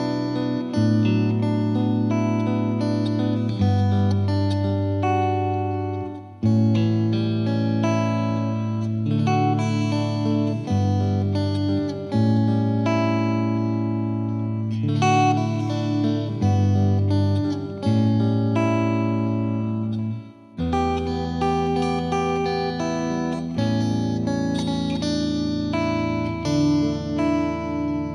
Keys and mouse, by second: 6.3-7.3 drag, 8.6-10.1 typing, 11.6-12.7 drag, 19.5 click, 27.2 click.